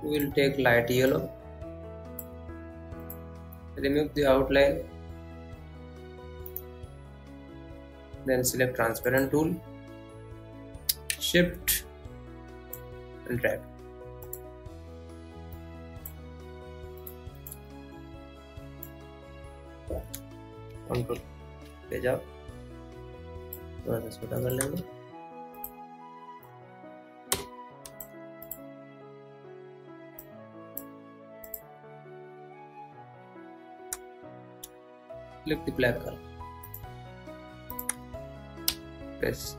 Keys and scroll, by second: 22.2 ctrl+Home.